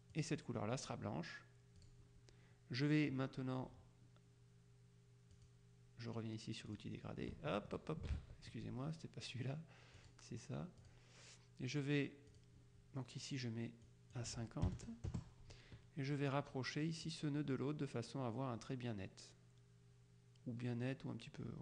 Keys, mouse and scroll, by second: 0.2 click, 1.9 click, 5.4 click, 6.8 click, 8.2 ctrl+z, 10.0 click, 10.9 click, 12.4 click, 13.9 click, 14.8 KP_0, 15.2 KP_Enter, 17.2-21.6 drag.